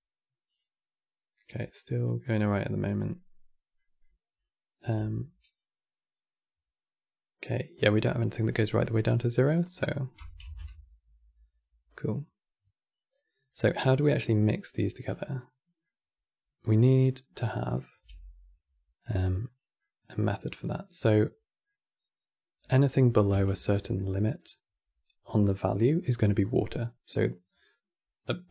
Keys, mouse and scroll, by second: 1.6-2.0 middle drag, 2.0 scroll up 1, 2.6-7.6 middle drag, 7.8-9.2 middle drag, 9.2-12.5 drag, 13.8-14.8 middle drag, 14.8 scroll down 4, 15.0-17.4 middle drag, 17.4 drag, 17.8 g, 19.1-23.2 middle drag, 23.2 shift+a, 25.9 right click.